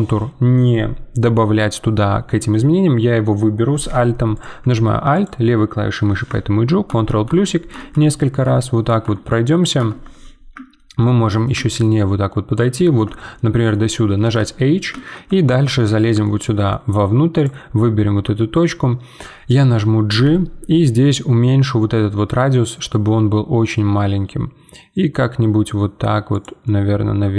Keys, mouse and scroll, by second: 4.3-6.9 drag, 6.9 ctrl+KP_Add, 7.1-8.2 ctrl+KP_Add, 9.8 ctrl+KP_Add, 10.7-11.9 shift+middle drag, 11.9-12.3 scroll up 2, 12.3-14.2 middle drag, 14.2 h, 15.0 shift+middle click, 15.4-15.8 scroll up 3, 15.8-17.4 middle drag, 17.4 click, 20.1 g, 26.6-27.3 middle drag.